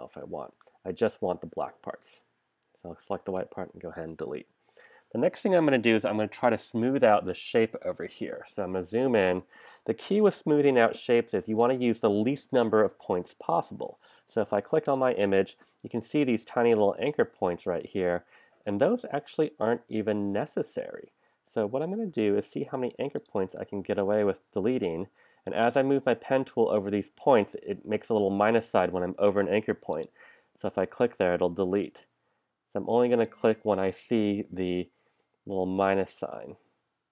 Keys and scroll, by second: 3.3 BackSpace, 8.8 super+=, 10.0 space, 22.1 p.